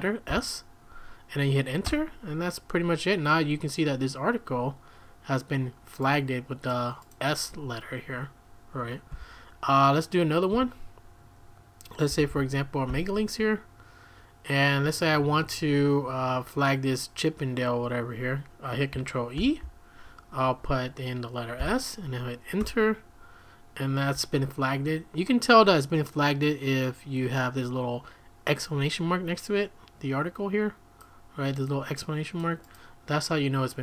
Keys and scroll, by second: 0.3 s, 1.8 Return, 9.1 q, 10.5 q, 12.1-13.0 typing, 19.4 ctrl+e, 21.6 s, 22.6 Return.